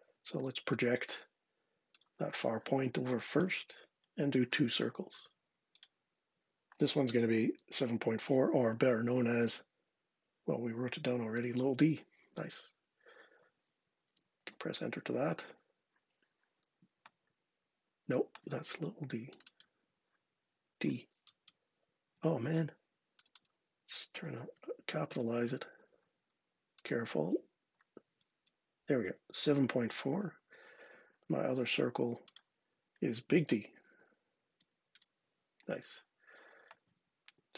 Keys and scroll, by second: 0.2 p, 4.3 c, 11.1 d, 12.1 Return, 13.9 Return, 20.6 d, 21.0 Return, 21.1 Return, 24.3 d, 28.1 Return, 31.0 c, 33.2 shift+d, 34.3 Return, 34.7 Return.